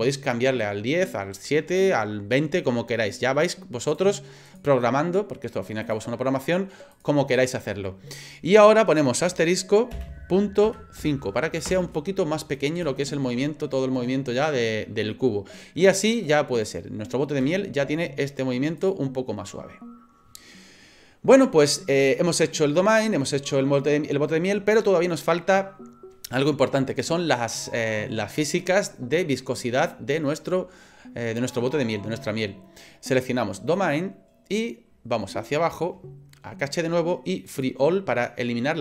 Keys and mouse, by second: 3.9 click, 4.5 click, 5.9-12.2 drag, 12.8 space, 17.4 space, 33.8 right click, 37.5 click.